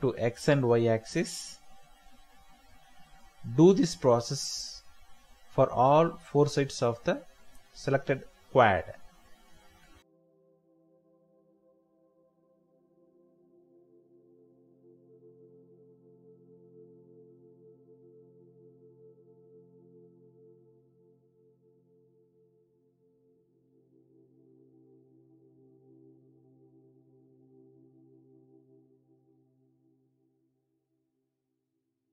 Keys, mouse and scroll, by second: 2.3 Return, 2.7 typing, 6.4 Return, 6.9 typing, 8.2 Return, 9.2 typing, 11.1 Return, 11.6 typing, 13.5 Return, 14.1 typing, 15.1 typing, 15.2 Return, 18.7 typing, 20.3 Return, 20.9 typing, 21.7 Return, 22.1 ctrl+z, 22.9-23.8 typing, 23.5 Return, 28.0 Escape, 30.6 Return.